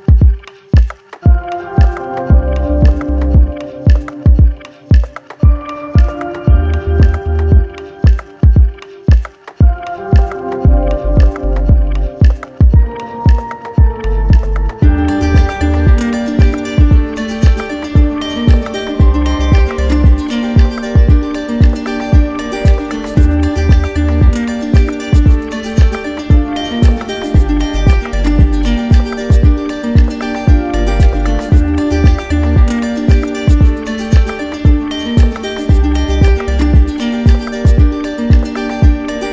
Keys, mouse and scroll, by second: 0.0 shift+click, 1.1 alt+click, 2.5 click, 3.1 click, 6.6 middle click, 7.2 middle click, 7.6 middle click, 7.8-8.4 scroll, 9.1-9.5 scroll, 10.2 scroll, 19.7 z, 22.1 click, 23.0 z, 26.8 click, 30.2 click, 34.5 click, 34.9 ctrl+z, 38.1 ctrl+d.